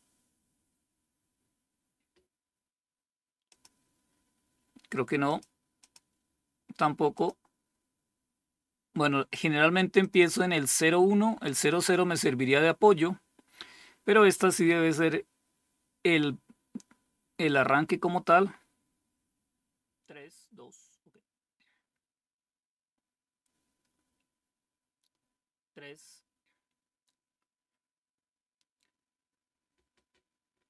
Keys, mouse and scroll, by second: 3.0 click, 4.7 click, 5.2 click, 6.6 click, 9.5 click, 9.6 click.